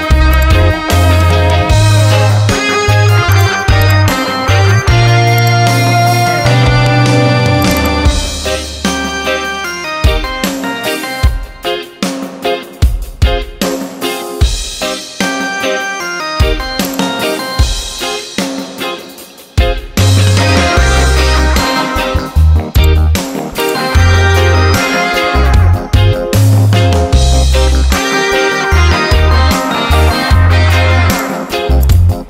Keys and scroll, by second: 9.8 Return, 12.3 ctrl+t, 19.8 Return, 21.4 ctrl+a, 25.3 ctrl+d.